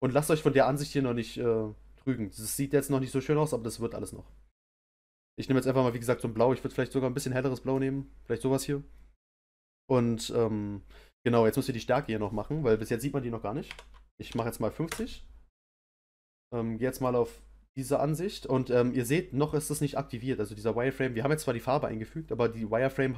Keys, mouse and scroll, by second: 6.8 click, 14.8 click, 17.0 click.